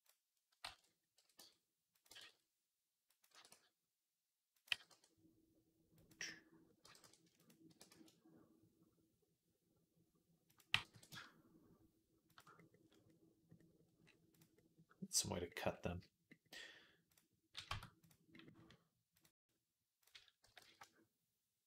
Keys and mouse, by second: 0.5 ctrl+z, 1.0 r, 1.9-4.9 drag, 1.9 g, 3.2 r, 4.5 g, 4.9-14.2 middle drag, 6.7 g, 7.5 r, 10.4 r, 10.6 g, 14.5 middle click, 15.4 middle click, 15.6 middle click, 16.1-21.6 middle drag, 17.5 Tab, 17.8 click, 19.0-21.6 drag, 20.3 g.